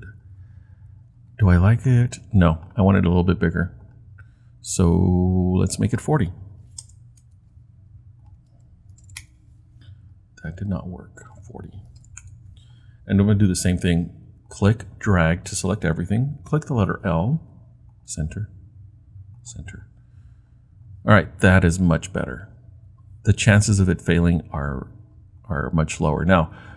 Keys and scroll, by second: 6.5-7.3 typing, 8.5 Return, 8.7-9.4 typing, 11.7-12.4 typing, 16.5 l.